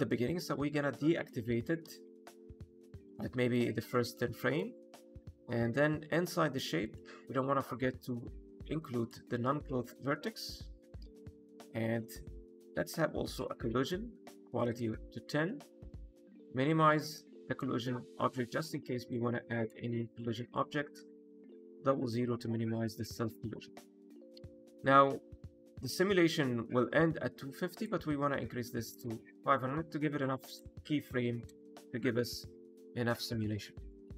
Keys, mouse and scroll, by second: 0.3 click, 3.1 shift+middle click, 3.8 middle click, 4.3 shift+middle click, 5.0-6.0 scroll down 5, 6.7 click, 10.2 click, 10.4-11.1 scroll down 5, 13.7 click, 16.3 click, 17.4 KP_0, 18.3-19.5 scroll down 4, 19.5 click, 20.4 click, 21.2 KP_0, 22.8-23.3 scroll up 5, 27.6 click, 28.9 KP_0, 30.4 click, 31.5 KP_0, 32.7 middle click, 33.3 scroll down 2, 33.6 middle click, 33.9 click.